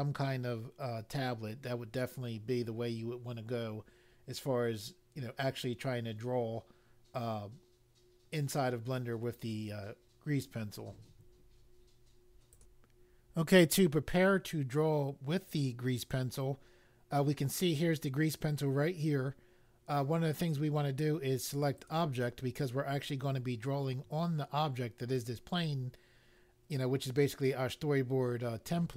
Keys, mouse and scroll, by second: 12.5 click, 21.7 click.